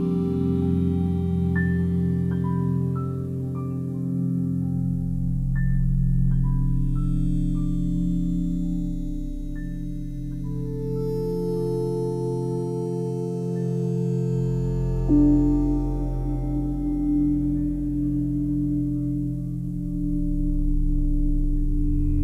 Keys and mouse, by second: 1.1 shift+click, 1.9-3.5 drag, 3.7-5.0 drag, 6.0 shift+click, 7.8 click, 9.0 shift+click, 10.3 click, 10.6-11.8 shift+drag, 13.1-14.3 drag, 14.3 typing, 14.7 shift+click, 17.4 click, 18.3 shift+click, 20.0-21.5 drag, 22.0 Delete.